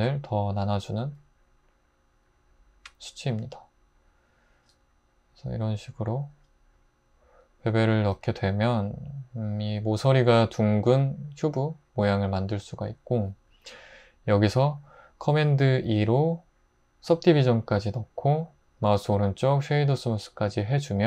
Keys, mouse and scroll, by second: 15.8 super+2.